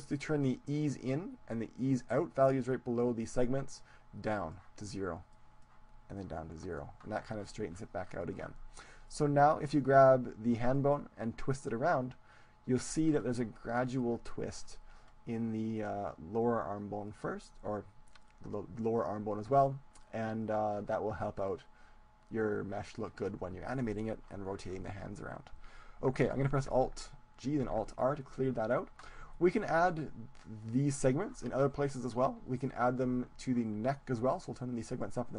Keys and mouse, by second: 4.2-8.2 drag, 8.2-10.0 middle drag, 9.2-10.8 right drag, 10.0 click, 10.8-12.0 middle drag, 12.0-13.4 drag, 13.4-15.6 middle drag, 18.3-23.2 middle drag, 24.8-26.3 middle drag, 26.7 alt+g, 27.6 alt+r, 28.4-31.6 middle drag, 32.7-34.6 right drag, 35.0-35.3 drag.